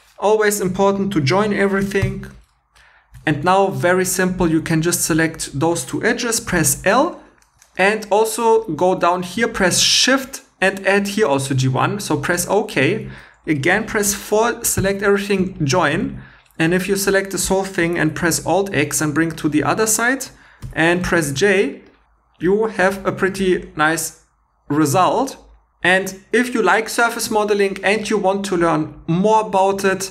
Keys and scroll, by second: 2.0 j, 3.1 2, 6.5 l, 7.6 shift+e, 13.7 4, 14.8 j, 15.6 shift+e, 18.3 alt+x, 20.6 j, 21.2 shift+e.